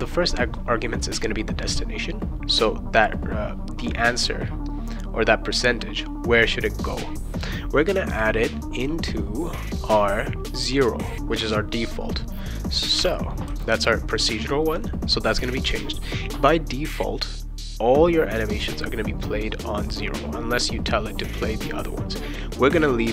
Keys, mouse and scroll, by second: 13.0 0.